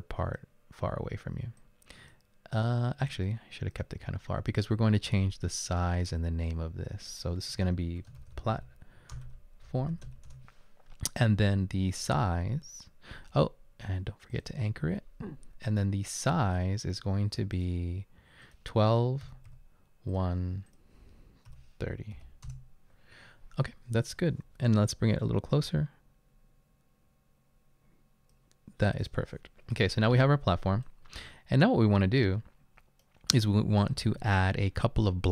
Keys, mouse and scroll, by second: 1.6-2.0 drag, 3.1 click, 8.0-10.7 typing, 19.3 typing, 21.5-22.2 typing, 22.5 Return, 23.3 typing, 24.7-28.3 drag.